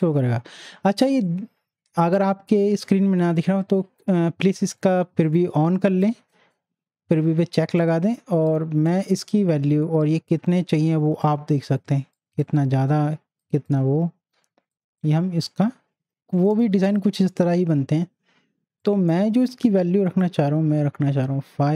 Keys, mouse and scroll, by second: 4.7-7.4 drag, 8.5-12.1 drag, 11.5-11.8 drag, 18.8 click.